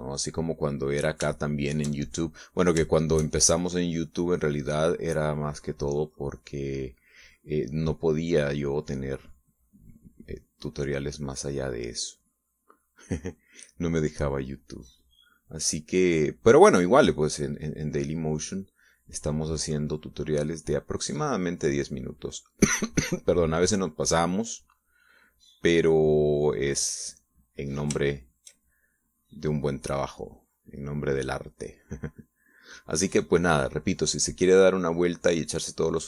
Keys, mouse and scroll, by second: 1.1 middle click, 2.4 shift+middle click, 3.9 shift+middle click, 4.8-11.5 drag, 11.8-13.9 drag, 18.0 click, 18.4-23.3 drag, 24.6-28.8 drag, 29.0 shift+middle click, 31.2-36.0 drag.